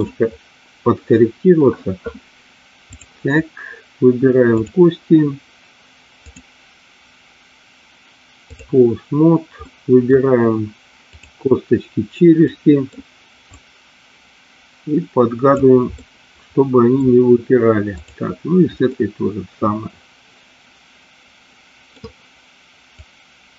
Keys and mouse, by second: 4.5 click, 6.4-8.8 drag, 9.7 middle click, 11.2 click, 12.5 middle click, 13.8-15.8 drag, 16.0-17.0 middle drag, 18.9-22.0 middle drag, 23.0-23.5 drag.